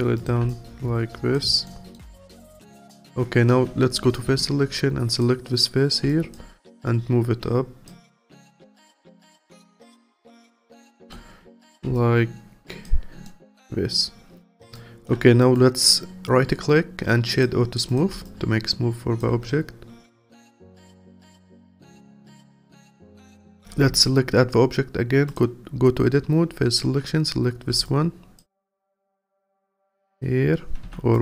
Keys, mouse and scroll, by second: 0.5-1.6 alt+drag, 1.6 alt+middle click, 2.2-4.3 alt+drag, 4.3 3, 5.1 click, 6.1 alt+click, 8.2 alt+click, 8.9 alt+middle click, 9.6-10.8 alt+drag, 10.8 alt+middle click, 11.5 Tab, 11.9-13.2 alt+drag, 13.2-14.7 alt+middle drag, 14.7-15.4 alt+drag, 15.4-17.9 right drag, 17.9 click, 18.2-19.4 alt+drag, 19.4-20.1 scroll down 6, 20.1-21.3 alt+drag, 21.3-22.2 scroll up 4, 22.2-23.0 alt+middle drag, 23.0 click, 23.8 Tab, 25.3 click, 27.8-30.1 alt+drag, 30.8 2, 31.1 click.